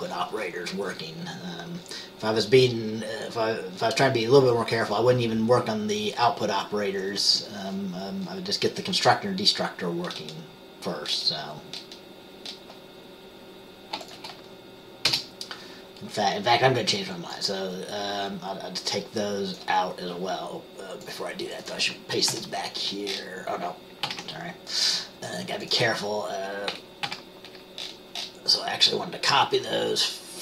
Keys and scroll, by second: 15.2 BackSpace, 22.4 ctrl+v, 24.2 ctrl+z, 27.2 ctrl+z.